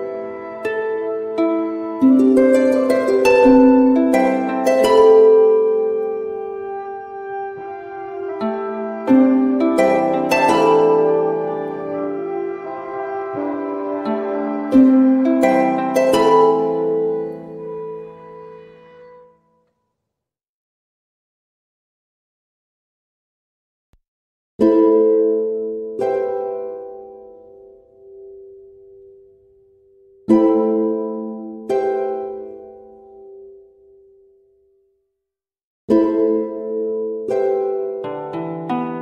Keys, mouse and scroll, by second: 1.5 click, 4.1 click, 7.5 click, 9.1 Down, 11.2 Up, 13.3 Down, 20.2 Up, 21.8 Down, 21.8 ↕, 26.6 click, 29.2 click, 30.6 ctrl+g, 31.1-33.9 drag, 33.9 m, 35.7-39.0 shift+drag.